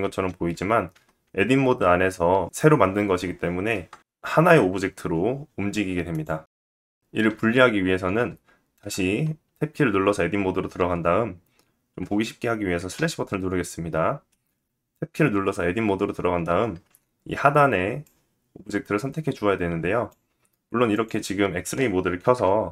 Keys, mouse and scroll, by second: 0.5 Tab, 3.7 Tab, 4.5 g, 8.4 Tab, 12.6 /, 16.3 alt+z, 17.6-20.6 drag, 20.6-22.6 middle drag, 21.9 KP_1, 22.6-22.7 drag.